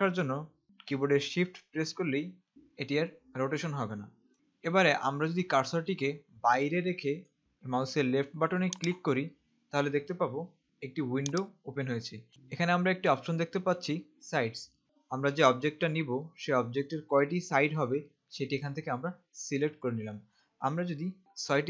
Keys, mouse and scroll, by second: 9.0 click, 12.3 click.